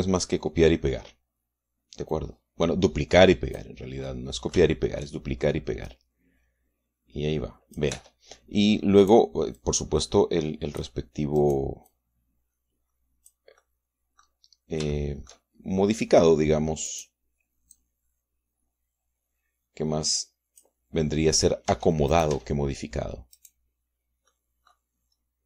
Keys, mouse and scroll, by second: 2.9-4.6 drag, 4.9 middle click, 5.7 shift+click, 6.7-8.8 drag, 8.8 Tab, 9.9 right click, 10.4-11.9 drag, 12.2 right click, 12.7-14.3 drag, 14.3-16.3 middle drag, 14.5 click, 15.8 shift+click, 17.7 click, 18.6-21.7 drag, 22.5 Tab, 23.0 click, 24.2 click, 25.1-25.4 drag.